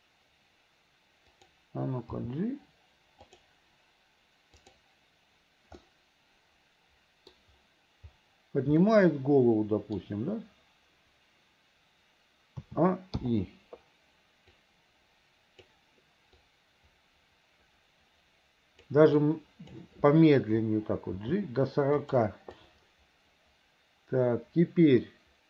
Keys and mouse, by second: 2.3 g, 4.7 click, 5.9-7.4 middle drag, 9.0 middle click, 10.0 middle click, 12.7 a, 13.3 i, 14.7-15.8 drag, 16.5-19.0 drag, 19.3 click, 21.3 g, 22.7-25.4 drag.